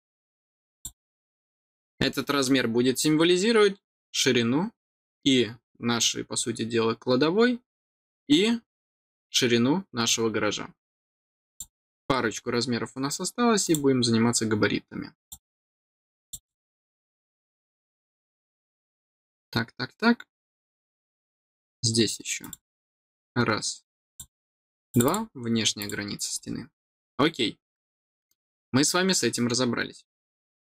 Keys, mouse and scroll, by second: 0.7 click, 2.0 middle click, 2.4 scroll down 1, 11.4 click, 12.1 scroll up 1, 12.3 scroll down 1, 13.5 click, 15.1 click, 16.1 click, 16.3 click, 17.0 click, 17.6 scroll down 1, 18.1 middle click, 18.5 scroll down 1, 21.0 scroll up 1, 22.3 click, 24.0 click, 24.8 click, 25.0 click, 25.7 click, 26.3 scroll down 1, 27.3 scroll down 1, 27.6 middle click, 29.9 scroll down 1, 30.5 middle click.